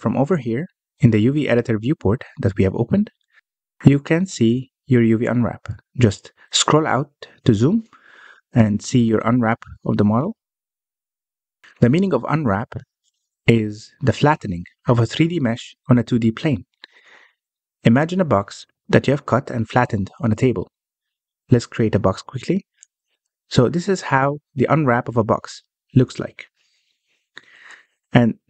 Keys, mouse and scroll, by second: 0.3-0.8 scroll down 1, 0.9-4.6 scroll down 16, 4.6-7.6 scroll up 1, 7.8 scroll up 3, 8.4-9.2 scroll down 3, 9.2-10.4 middle drag, 10.4-10.8 scroll down 2, 10.8-17.6 middle drag, 18.9-19.9 scroll down 1, 19.9 shift+right click, 20.7-21.1 scroll up 1, 21.1-22.2 shift+middle drag, 22.2 shift+a, 25.4-25.9 scroll up 7, 25.9 middle click, 26.2-28.4 scroll up 3.